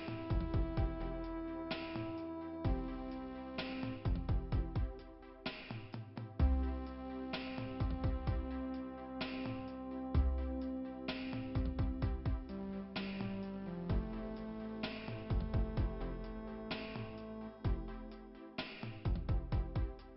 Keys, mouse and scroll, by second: 6.7 middle click, 7.6 scroll up 1, 17.7 middle click, 18.5 scroll up 2.